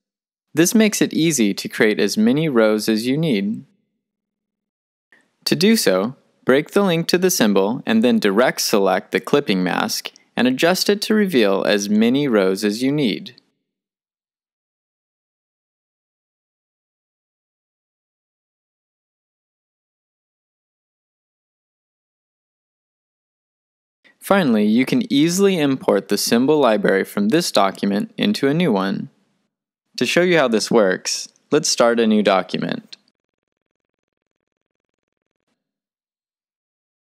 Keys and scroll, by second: 11.8 v, 17.3 super+c, 17.9 shift+super+v, 33.1-34.5 typing, 34.6 Return.